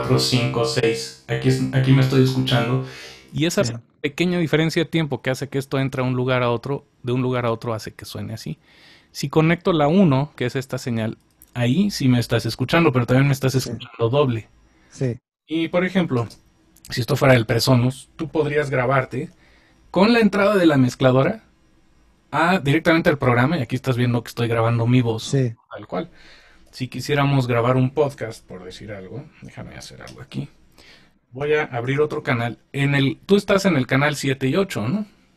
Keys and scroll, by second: 16.3 super+space, 26.6 super+z, 30.1 super+., 31.9 shift+super+n.